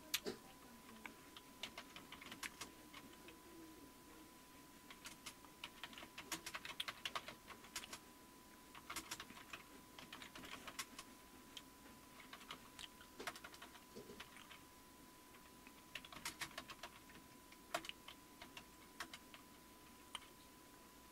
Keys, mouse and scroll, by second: 1.4-3.8 typing, 4.9-13.8 typing, 15.7-19.5 typing.